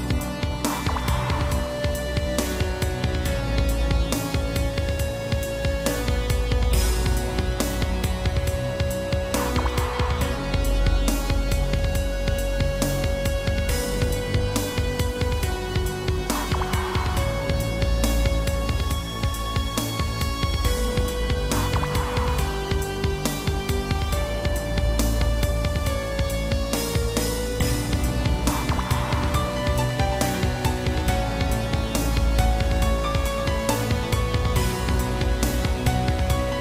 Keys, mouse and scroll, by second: 0.0 shift+click, 0.2 shift+click, 0.9 7, 1.8 r, 3.6 Escape, 5.9 click, 5.9 click, 7.3 click, 7.4 click, 8.5 r, 10.0 click, 10.3 middle click, 10.3-10.7 scroll, 11.2 Left, 11.7 Right, 12.5 Right, 14.6 middle click, 15.6 7, 16.4 r, 17.3 click, 17.4 double click, 17.7 middle click, 18.7 Left, 18.9 Left, 19.4 Right, 19.7 Right, 20.3 Right, 21.8 Left, 22.3 Right, 22.9 Left, 22.9 Right, 23.2 Right, 24.5 Left, 26.0 Left, 26.1 Left, 26.3 Left, 31.0 Right, 31.2 Right, 31.5 Right, 32.2 Left, 32.8 Left, 32.9 Left, 33.0 Left, 34.5 ctrl+s, 34.9 middle click, 35.3 middle click, 35.8-36.6 typing.